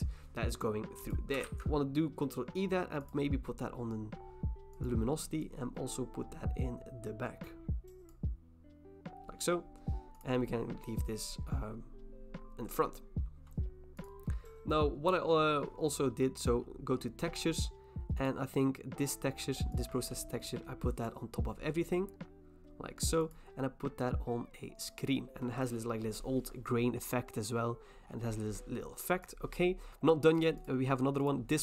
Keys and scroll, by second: 1.4 ctrl+e.